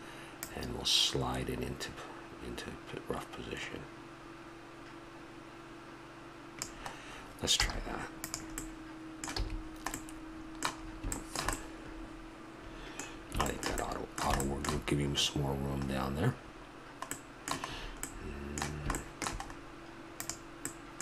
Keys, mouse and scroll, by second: 2.2-6.0 middle drag, 7.6 z, 8.6-8.9 drag, 9.4 a, 11.1 middle drag, 13.0-15.8 middle drag, 16.3-17.1 middle drag, 17.7 middle click, 20.1-21.0 right drag.